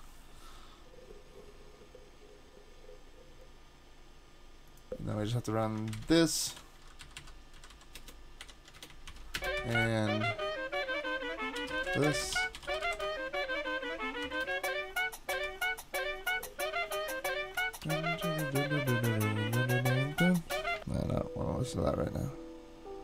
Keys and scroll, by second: 5.9 shift+super+Right, 6.5 super+c, 7.2 Down, 7.6 Down, 7.7 i, 8.0 Return, 8.4 Up, 8.8 Return, 9.1 super+v, 11.5-13.3 typing, 14.2 shift+super+Left, 15.3 super+c, 17.8 super+Tab.